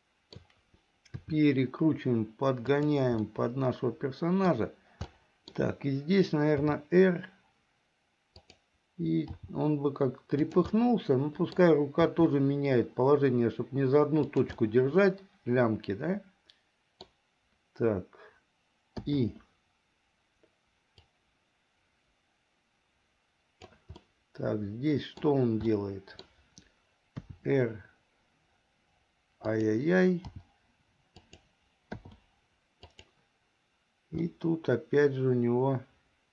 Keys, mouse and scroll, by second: 0.0 shift+middle click, 1.4 r, 3.4-4.8 middle drag, 5.3 middle click, 6.8 r, 9.5 g, 10.9 scroll up 1, 11.0 middle click, 12.3 g, 14.7-15.0 scroll up 1, 15.0-17.3 middle drag, 19.1 i, 21.2-23.9 drag, 24.2-25.5 middle drag, 25.9 middle click, 27.4 r, 30.5 g, 32.3 i, 33.1 click, 34.4-36.3 middle drag.